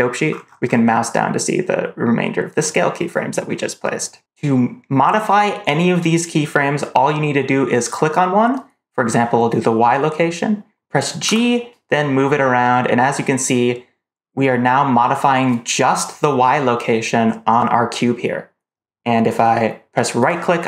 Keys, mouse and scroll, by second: 0.0 scroll down 2, 0.2 scroll up 2, 0.3 scroll down 2, 0.5 scroll up 2, 0.7-1.3 scroll down 2, 7.7 click, 11.1 g.